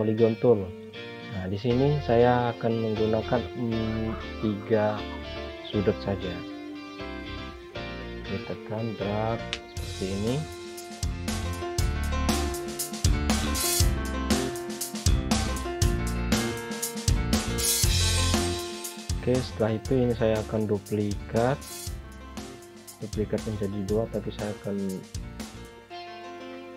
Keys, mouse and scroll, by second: 0.6 click, 5.1 click, 19.1 click, 24.9 click.